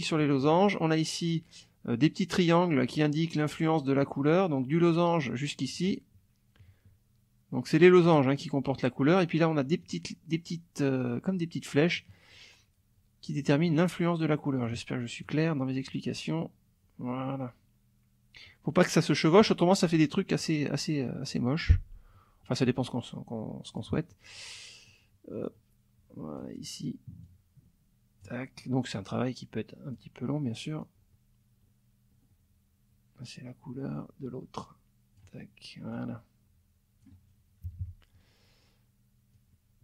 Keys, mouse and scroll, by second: 2.4-3.7 drag, 4.8 click, 5.6 click, 8.0 click, 9.8 click, 13.2-14.8 drag, 15.2-23.9 drag, 24.9-26.6 drag, 27.2-28.4 drag, 28.9-30.1 drag, 30.8-35.3 drag, 35.9-37.2 drag, 37.6 KP_Subtract, 39.3-39.8 drag.